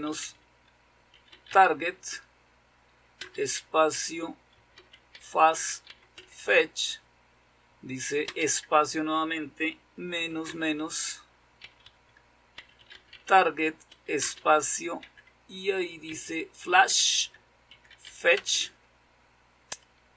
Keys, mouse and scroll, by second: 0.0-1.2 typing, 3.2-6.9 typing, 8.2 space, 10.3 typing, 11.5-14.9 typing, 16.0-19.0 typing.